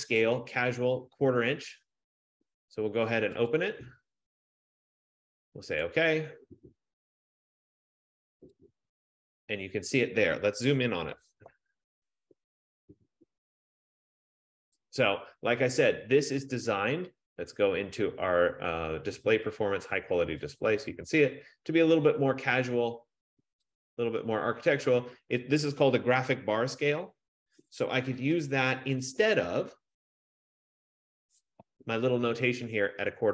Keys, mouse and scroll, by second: 0.4 click, 3.8 click, 6.0 click, 9.0 click, 10.5 F15, 11.6 ctrl+=, 12.5 ctrl+=, 12.9 ctrl+=, 13.3 ctrl+=, 13.7 ctrl+=, 14.1 ctrl+=, 16.5 right click, 20.7 click, 23.9 click, 29.1 click, 29.4 ctrl+-, 30.2 ctrl+-, 31.0 ctrl+-.